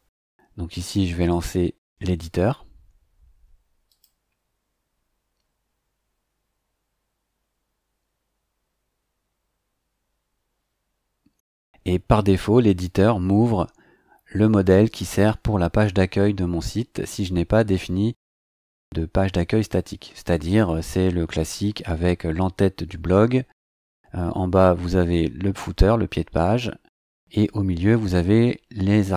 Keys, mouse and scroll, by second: 3.9 click, 23.9-24.8 scroll down 6, 26.5-29.1 scroll up 4.